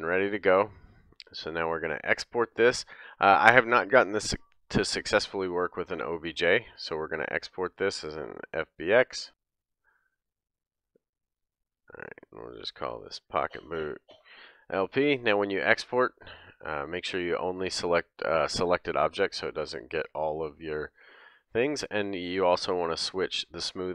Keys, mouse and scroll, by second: 0.0 click, 0.0-1.4 middle drag, 1.4-23.9 drag.